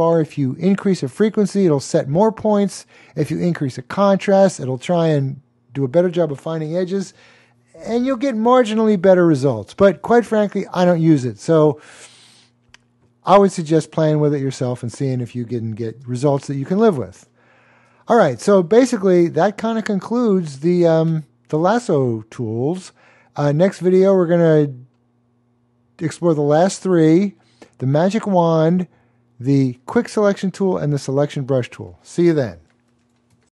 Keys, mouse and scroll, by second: 15.9 alt+super+space, 16.3 alt+super+click, 16.4 alt+super+space, 16.6 alt+super+space, 16.7 alt+super+space, 16.8 alt+super+space, 16.8 double click, 16.9 alt+super+space, 28.5 click.